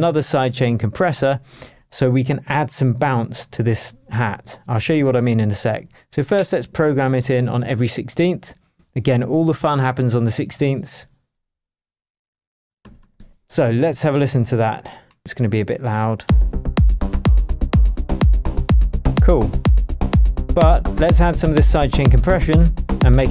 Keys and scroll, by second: 7.2 super+d, 12.8 super+d, 13.5 shift+super+d, 13.6 shift+super+Tab, 14.1 shift+Tab, 16.2 space.